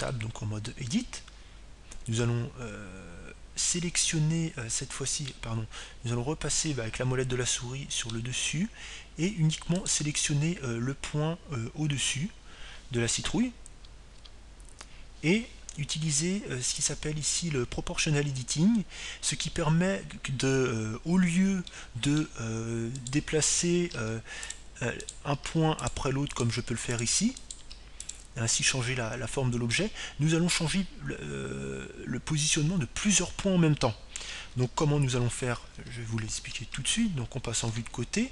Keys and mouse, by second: 2.2 Tab, 7.3-9.1 middle drag, 11.8-13.9 right drag, 16.1 KP_3, 18.7-21.9 drag, 23.7-25.1 middle drag, 25.1-26.8 right drag, 26.3 g, 26.6-30.3 drag, 27.0-30.3 right drag, 27.4 g, 29.1 g, 30.7 click, 30.7-32.6 middle drag, 30.7 right click, 36.7 ctrl+z, 37.1 ctrl+z, 37.4 ctrl+z, 37.7 ctrl+z, 38.1 ctrl+z.